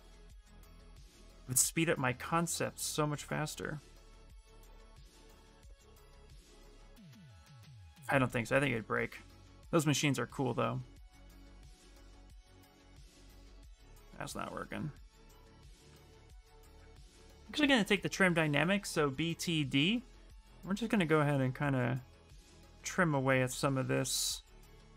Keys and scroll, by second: 5.8 s, 6.8 s, 9.2 s, 11.3 s, 14.3 s, 14.9 s, 16.7-18.2 typing.